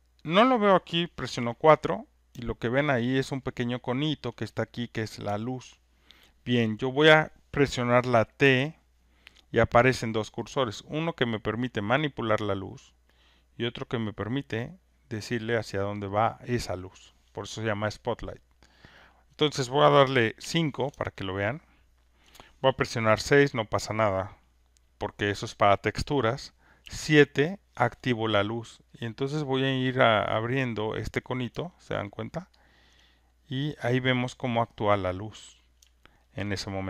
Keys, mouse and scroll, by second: 1.3 4, 3.2 alt+right click, 3.7 alt+middle click, 4.2 alt+right click, 6.3 alt+right click, 6.6 alt+scroll, 7.0 alt+right click, 11.2 click, 14.1 click, 15.4 click, 16.8 click, 18.1 alt+middle click, 18.5 alt+right click, 18.5 alt+middle click, 19.1 alt+right click, 20.4 alt+right click, 20.5 5, 22.2 alt+click, 23.1 6, 26.8 7, 26.9 click, 31.3 click, 31.9 alt+middle click, 32.3 alt+scroll, 32.4 alt+right click, 32.9 alt+click, 34.9 alt+middle click, 35.5 click, 36.4 alt+right click.